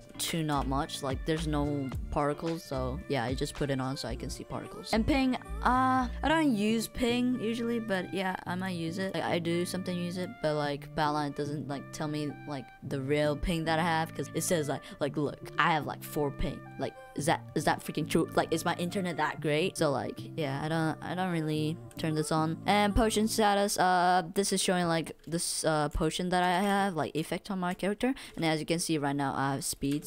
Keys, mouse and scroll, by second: 25.0 click, 25.9 click, 26.0 click, 26.5 w, 26.8 space, 27.2 click, 27.2 right click, 27.7 click, 27.7 right click, 28.3 a.